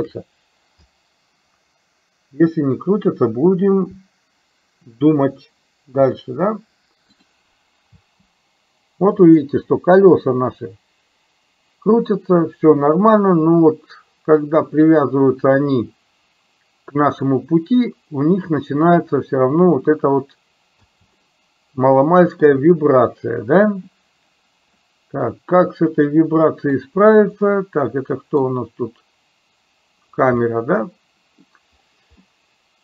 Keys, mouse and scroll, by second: 8.0 space, 20.9 space, 21.3-22.5 middle drag, 24.9-26.8 middle drag, 27.6-28.4 middle drag, 30.5-31.5 middle drag, 32.3-32.8 middle drag.